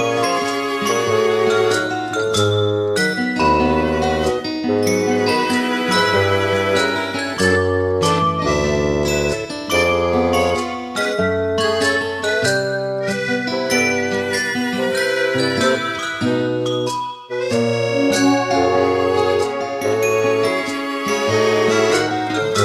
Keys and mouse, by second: 0.5 middle click, 0.8 middle click, 1.7 middle click, 2.3 middle click, 3.1 middle click, 4.0 middle click, 4.4 middle click, 19.4 middle click, 20.5 middle click, 20.9 middle click, 21.5 middle click.